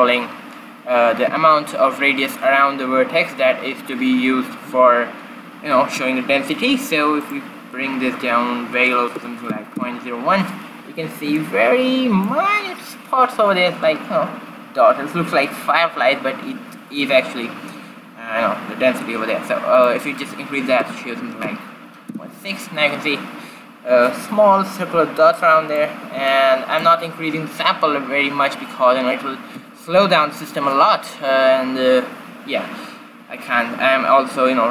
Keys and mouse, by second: 7.4-9.1 drag, 9.1 middle click, 11.5-13.3 middle drag, 19.9-21.8 drag, 25.5-28.2 middle drag.